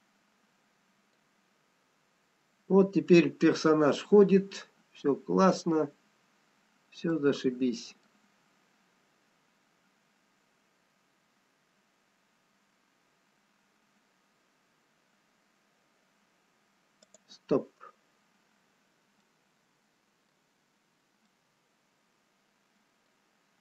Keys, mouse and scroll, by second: 7.7 middle click, 18.1 click, 18.7-19.1 scroll down 1, 19.6 middle click, 22.7-23.6 scroll up 1.